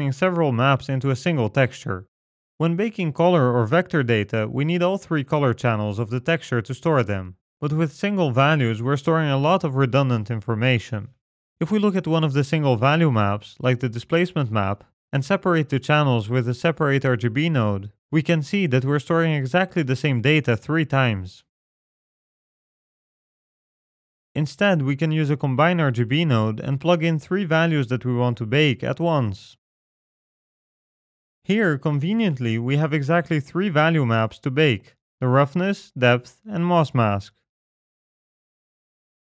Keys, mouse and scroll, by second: 3.9 scroll down 5, 4.3 middle click, 4.6-6.1 scroll up 6, 6.1 click, 11.1-11.7 scroll down 8, 11.7 middle click, 12.1-13.3 scroll up 6, 12.5 middle click, 13.8 middle click, 13.8-14.2 scroll up 1, 14.6 ctrl+shift+click, 15.0 scroll down 5, 15.3 middle click, 15.5-16.4 scroll up 1, 16.4 scroll up 1, 16.4 shift+a, 19.9-20.8 scroll up 3, 20.8 ctrl+shift+click, 20.8 scroll up 1, 22.2 ctrl+shift+click, 23.0-24.8 scroll down 11, 24.8 x, 25.0 scroll down 2, 25.2 middle click, 25.4 scroll up 3, 25.5 scroll down 1, 25.6 scroll up 2, 25.8 middle click, 26.3 scroll up 1, 26.3 shift+a, 29.2 click, 30.7 click, 30.8 x, 31.7 scroll down 1, 31.8 middle click, 32.2-33.2 scroll up 1, 33.2 scroll up 1, 33.3 click, 34.6 middle click, 34.8-36.1 scroll up 6, 35.2 click, 36.1 click, 37.6-38.0 scroll down 3, 37.8 middle click, 38.1-38.8 scroll up 2, 38.8 click.